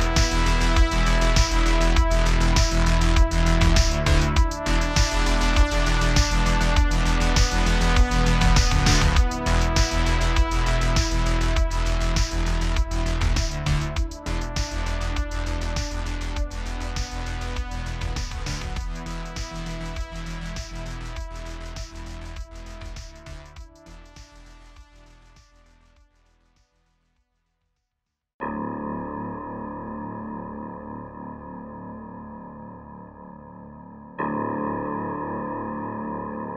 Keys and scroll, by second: 0.2 space, 0.7 space, 1.3 ⟲, 1.4 space, 4.1 space, 5.8 space, 8.7 space, 9.3 space, 14.1 space, 15.7 space, 19.2 BackSpace, 19.3 BackSpace, 19.9 Escape, 20.1 BackSpace, 20.5 ↻, 21.7 space, 22.7 space, 24.5 space, 25.2 space, 26.5 BackSpace, 26.7 BackSpace, 27.6 space, 28.2 space, 29.5 Return, 31.3 space.